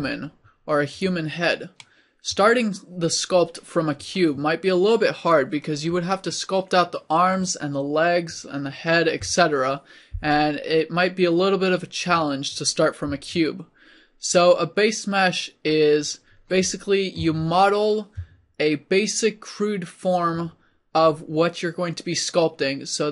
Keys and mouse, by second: 1.8-3.1 drag, 17.2 Tab.